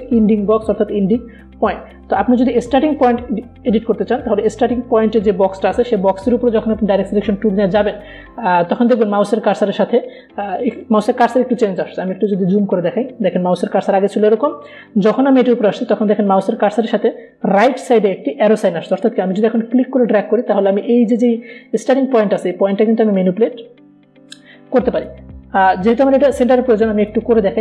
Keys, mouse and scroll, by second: 2.5 alt+Num_Lock, 2.5 alt+scroll up 1, 2.7-3.7 alt+scroll down 1, 5.0 alt+scroll up 1, 5.7-6.0 alt+scroll down 1, 12.2 alt+scroll down 1, 12.3 alt+scroll up 1, 21.2-23.5 drag, 23.5-24.1 alt+scroll down 1.